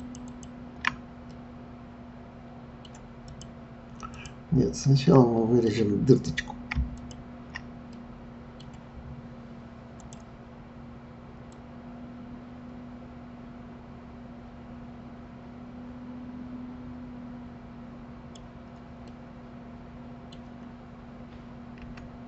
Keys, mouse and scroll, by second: 0.0 shift+click, 0.2 shift+click, 1.3-3.3 middle drag, 3.3 click, 4.1 click, 4.9-7.0 middle drag, 7.0 shift+click, 7.9-10.0 middle drag, 10.0 click, 11.5 click, 19.1-21.8 middle drag, 21.8 s.